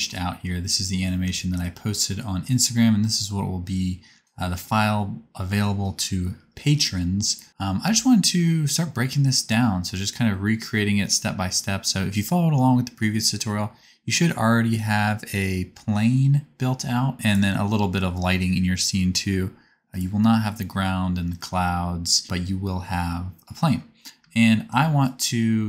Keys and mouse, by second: 3.0 middle click, 5.8 middle click, 6.2 middle click, 6.4 space, 7.4-9.0 drag, 7.6 space, 7.8 space, 11.0-13.0 drag, 24.1 space.